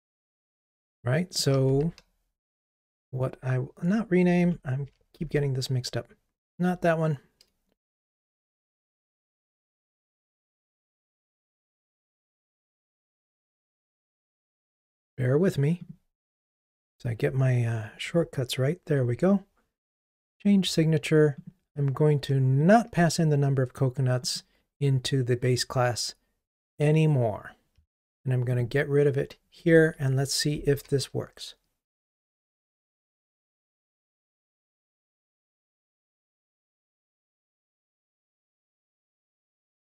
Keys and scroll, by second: 2.5 shift+F6, 5.4 super+6, 14.6 super+b, 18.0 super+b, 29.7 super+BackSpace, 30.8 super+BackSpace, 39.5 super+BackSpace.